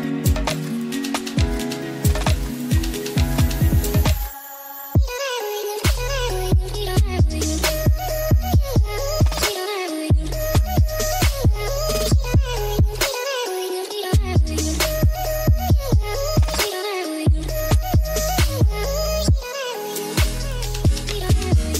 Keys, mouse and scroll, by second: 0.2 x, 0.9 shift+a, 6.1-6.9 drag, 8.1-8.6 drag, 10.1 click, 12.5 click, 14.6 middle click, 15.4 middle click, 16.5 middle drag, 17.0 middle click, 17.8-18.6 drag, 19.0 middle click, 19.9 middle click, 20.4 middle click, 21.3 ctrl+s, 21.6 middle click.